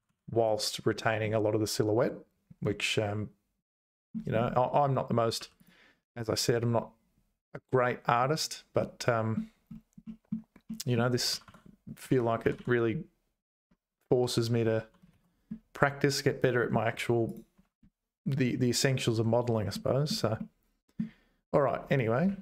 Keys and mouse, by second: 2.6-4.2 middle drag, 5.4 2, 5.6 click, 8.2-9.3 middle drag, 10.0 middle click, 10.7 middle click, 11.2 g, 12.4 g, 15.1 ctrl+s, 15.6-16.7 middle drag, 17.0 Tab, 17.3 click, 19.7 shift+middle click, 20.4 middle click.